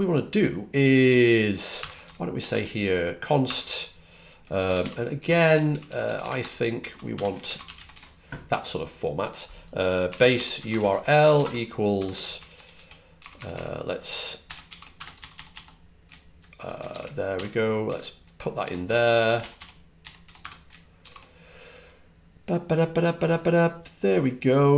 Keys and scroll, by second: 1.6 typing, 3.4 typing, 4.8-8.3 typing, 9.7-15.9 typing, 17.5-20.8 typing.